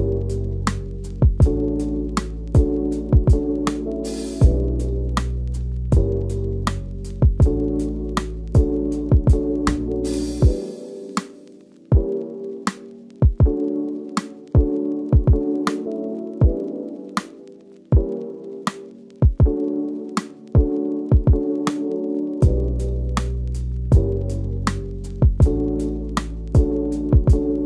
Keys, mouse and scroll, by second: 0.2 scroll up 2, 0.4 2, 0.9 shift+click, 3.0 shift+click, 5.6 ctrl+b, 6.3 ctrl+b, 6.5 middle click, 6.8 1, 7.2 click, 7.8 n, 8.1 click, 8.6 n, 8.8 scroll down 1, 9.0 middle click, 9.2 click, 9.2 3, 9.3 click, 9.7 shift+Left, 10.9 shift+middle click, 11.2 scroll up 2, 11.4 2, 11.5 alt+Left, 11.8 1, 12.7 shift+middle drag, 12.8-14.3 scroll up 1, 14.5 scroll up 2, 15.2 e, 15.7 scroll down 3, 15.9-16.2 shift+middle drag, 16.2 scroll up 2, 16.3 3, 16.4 click, 16.6 shift+click, 16.9 scroll down 2, 17.0 middle click, 17.2-17.7 scroll up 3, 17.5 shift+middle click, 17.9 middle click, 18.8-19.2 scroll down 1, 19.2 click, 20.3 scroll down 3, 20.5 middle click, 21.1 scroll up 1, 21.3 middle click, 21.9 click, 22.1 scroll down 2, 22.3-24.6 middle drag, 24.6-25.6 drag, 25.6-26.7 middle drag, 26.7 a, 27.3 2, 27.4 alt+Left, 27.5 alt+Left.